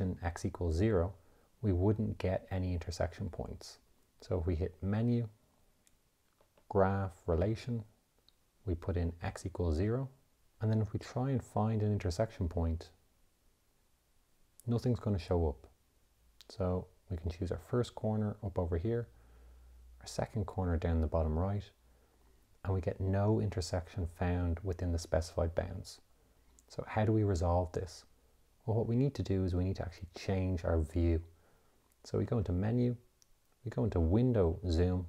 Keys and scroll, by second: 5.0 Menu, 6.9 3, 7.9 2, 9.5 x, 10.3 Return, 11.7 Menu, 13.2 6, 14.6 4, 32.7 Menu.